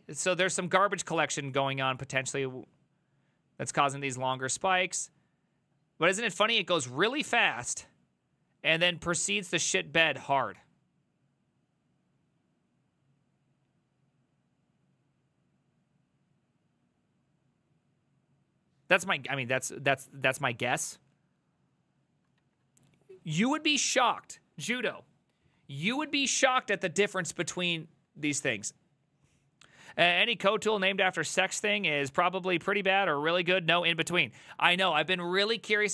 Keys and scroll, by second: 20.0 alt++, 22.4 alt+{, 28.7 alt++, 34.7 ctrl+t, 35.3-35.9 typing.